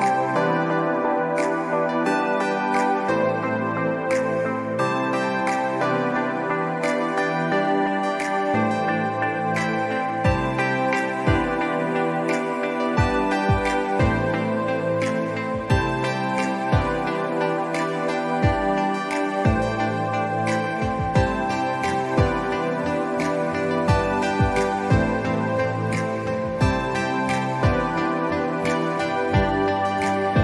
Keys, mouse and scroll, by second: 0.2 click, 1.7 click, 2.2 alt+scroll down 1, 4.6-8.7 drag, 8.7 click, 9.5 ctrl+z, 9.7 click, 10.3 alt+Num_Lock, 10.3 scroll up 1, 10.6 click, 13.0 click, 13.5-14.0 scroll down 2, 13.7 click, 14.3 click, 14.6 alt+scroll up 1, 14.7 click, 15.5 ctrl+z, 15.6-17.5 drag, 18.4 click, 19.2 click, 22.9 scroll up 1, 23.0 click, 24.2 alt+scroll down 1, 24.3 space, 24.5 click, 25.1-27.1 drag, 27.2 alt+scroll down 1, 27.4 click, 27.8 space, 27.9 click, 28.1-28.7 scroll up 2, 29.0 alt+scroll down 1, 29.3 ctrl+s, 29.7-30.2 scroll up 2.